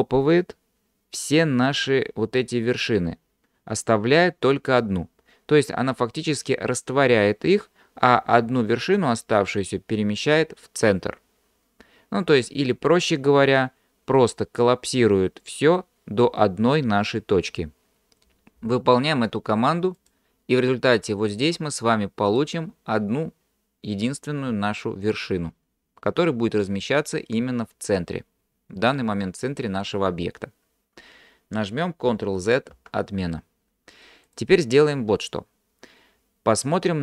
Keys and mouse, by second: 22.3 click, 32.8 ctrl+z, 34.4-35.8 drag.